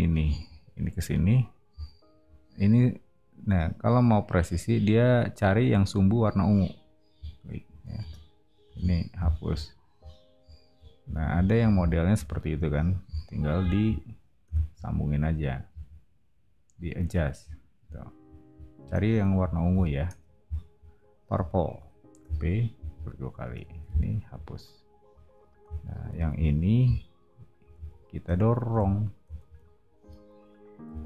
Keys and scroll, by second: 7.9 space, 8.6 e, 11.0 o, 14.4 l, 18.7 space, 20.0 BackSpace, 22.2 p, 23.4 space, 23.7 e, 25.7 o, 29.4 space, 30.8 p.